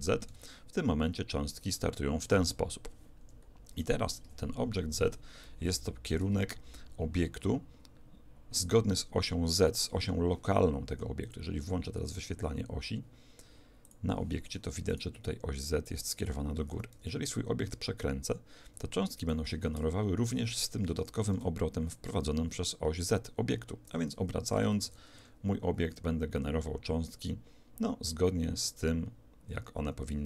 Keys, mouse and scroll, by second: 0.3 alt+a, 3.2 Escape, 4.2 KP_1, 5.4-7.2 middle drag, 11.2 click, 13.9 click, 14.9-17.0 right drag, 17.0 r, 21.4 alt+a, 23.9 Escape, 24.8 alt+a, 25.2 r.